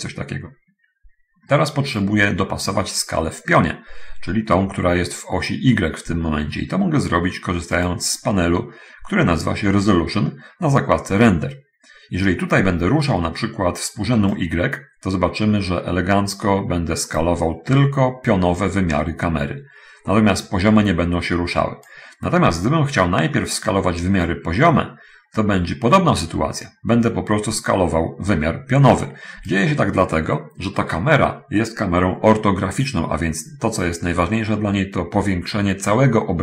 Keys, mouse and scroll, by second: 8.1 click, 14.7-22.2 drag, 24.6-30.0 drag, 29.6 Escape.